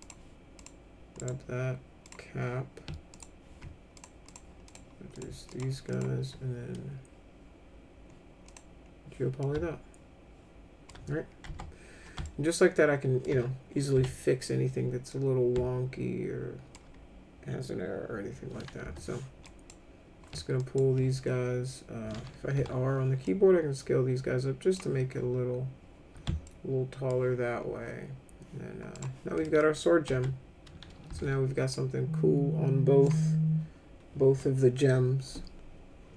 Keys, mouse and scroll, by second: 0.0 click, 0.6 click, 1.2 right click, 2.0 click, 3.1 ctrl+click, 4.0 alt+click, 4.2 alt+click, 4.7 alt+click, 5.1 alt+click, 5.5 alt+click, 5.9 alt+click, 8.5 click, 9.4-10.9 alt+middle drag, 11.5 F3, 12.3 alt+middle click, 13.9 F3, 15.1-16.7 middle drag, 18.8 1, 19.4 click, 20.6 ctrl+click, 22.5 r, 23.2-24.7 drag, 26.5 alt+middle click, 28.9 click, 29.4 middle click, 29.6 middle click, 30.1 F3, 31.1 w, 31.7-33.0 drag.